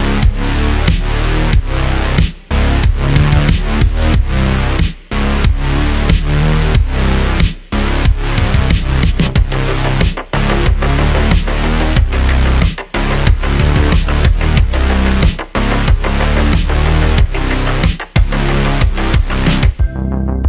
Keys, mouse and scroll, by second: 0.2 g, 3.2 scroll down 1, 3.3-4.8 middle drag, 4.8 click, 5.4-7.0 shift+middle drag, 5.9 scroll up 3, 7.0 click, 9.2-12.0 drag, 14.2 click, 14.5-18.1 drag, 19.2 click.